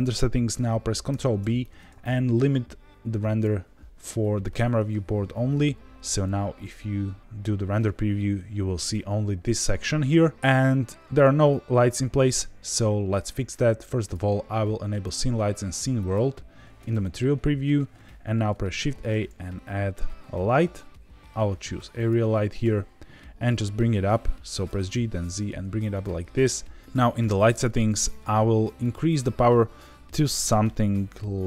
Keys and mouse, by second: 1.0 ctrl+b, 5.3 z, 12.1 z, 13.9-16.7 drag, 18.6 shift+a, 24.6 g, 24.8 z, 25.9 click, 28.8-31.4 drag.